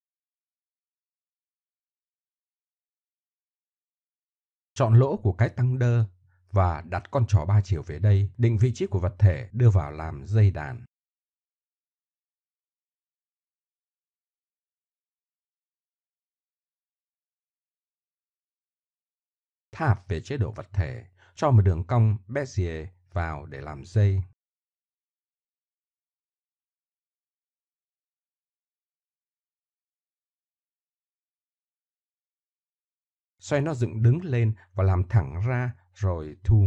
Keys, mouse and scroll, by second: 2.1-2.8 middle drag, 4.1 middle click, 4.3 middle click, 4.4 middle click, 5.3 right click, 5.5 Tab, 7.1-9.1 middle drag, 10.4 middle click, 15.9 middle click, 16.2 shift+s, 18.7-19.8 middle drag, 21.3 shift+a, 23.3 Tab, 24.3 shift+a, 29.1-30.0 middle drag, 30.4 Tab, 31.8 Tab, 34.6-35.1 middle drag, 36.0 r.